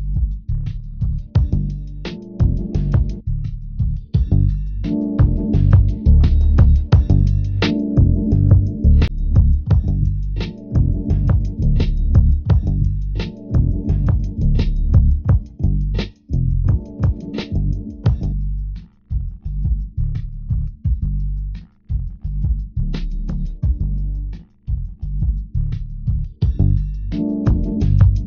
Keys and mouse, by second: 1.6 g, 4.0-7.5 drag, 8.5-13.5 drag, 14.6 shift+middle click, 18.4 g, 23.8-25.4 drag, 26.9 ctrl+Tab.